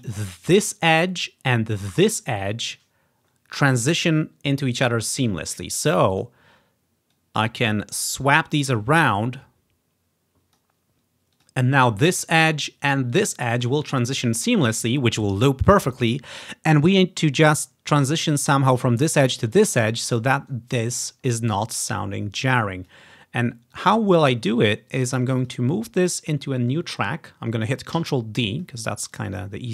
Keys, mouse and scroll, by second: 0.0 click, 0.5 click, 2.0 click, 6.2-7.8 drag, 8.3-12.1 drag, 12.2 click, 13.2 click, 17.3 click, 18.7 click, 19.8 scroll up 2, 21.9-23.0 drag, 23.8 click, 24.7 click, 25.1 click, 25.4 click, 25.6 click, 26.2 click, 28.0 ctrl+d, 28.6 click, 29.4-29.7 drag.